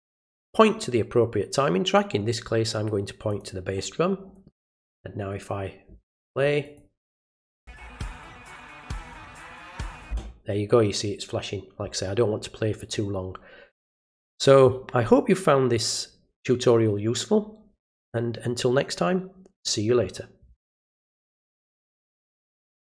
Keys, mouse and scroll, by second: 0.2 click, 3.3 click, 6.6 click, 21.1 click.